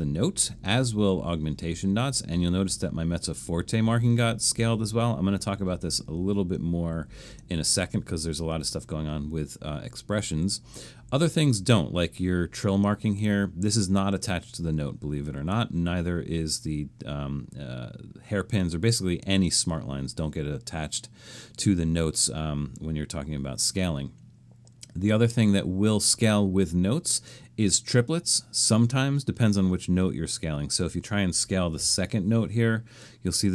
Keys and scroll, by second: 31.5-32.3 typing.